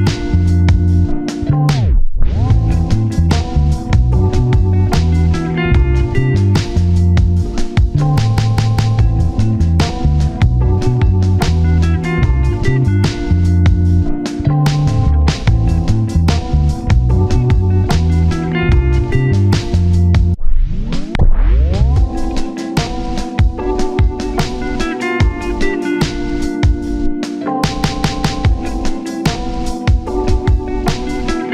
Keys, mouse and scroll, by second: 2.4 alt+z, 2.8 shift+click, 7.1 ctrl+z, 10.1 shift+click, 12.9 1, 13.1 scroll up 1, 13.8-14.2 scroll down 1, 14.3 shift+click, 15.0 i, 18.3 typing, 19.4-20.8 typing, 20.0 scroll up 1, 20.1 shift+middle click, 20.5-20.8 scroll down 1, 24.9-25.7 typing, 28.0-29.5 typing.